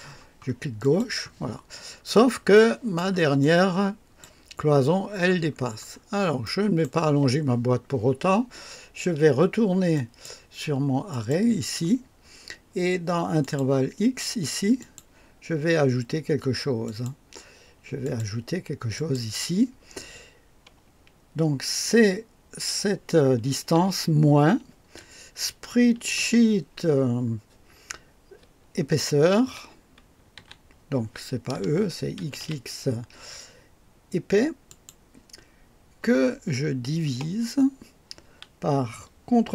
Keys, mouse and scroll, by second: 0.8 click, 2.0-2.4 scroll up 1, 2.5 right click, 2.7-3.1 typing, 3.4-4.4 drag, 4.2-4.9 typing, 5.4-6.2 scroll down 2, 6.4 right click, 7.5 typing, 9.9 click, 11.1 click, 13.4 click, 14.8 click, 16.8 click, 18.0 click, 18.9 click, 23.7 -, 24.9 typing, 25.9 ctrl+v, 30.3 e, 31.5-32.4 typing, 34.7 click, 37.1 typing, 39.3 ctrl+v.